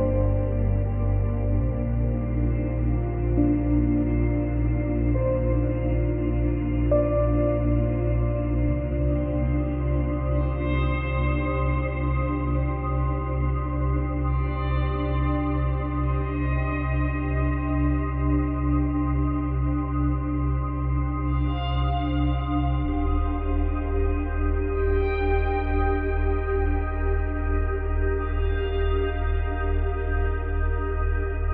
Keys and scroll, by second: 20.0 space, 21.7 space, 23.8 ctrl+z.